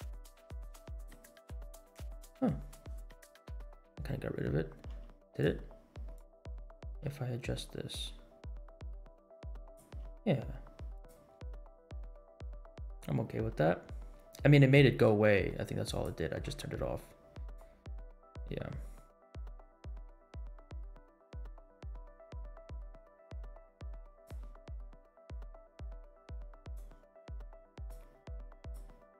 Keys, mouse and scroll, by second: 0.3 click, 2.9-3.6 scroll up 4, 4.0 scroll down 1, 4.8 g, 5.2-5.6 right drag, 6.1 click, 7.0 g, 11.6 scroll down 2, 12.3 scroll up 1, 12.9 scroll up 1, 13.5 scroll down 2, 15.9 click, 17.5-24.4 drag, 25.0-25.9 scroll down 7, 26.6 click, 27.9 click, 28.7-29.1 drag.